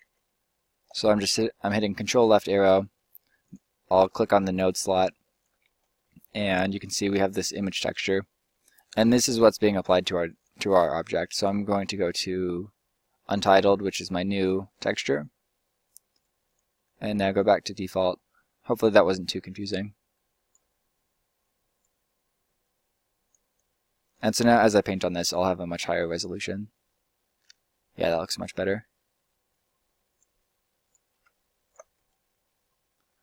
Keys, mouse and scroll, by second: 7.3 shift+a, 10.3 click, 32.6-33.2 right drag.